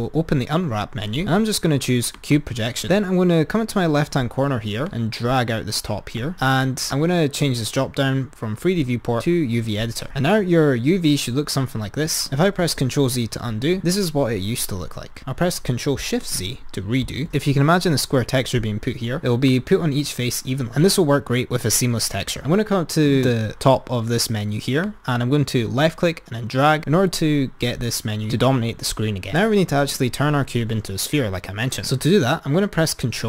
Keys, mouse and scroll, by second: 4.8-6.7 drag, 7.0-12.7 drag, 12.7 ctrl+z, 17.1 ctrl+shift+x, 17.3 click, 19.6 click, 22.5 Tab, 24.9-33.2 drag.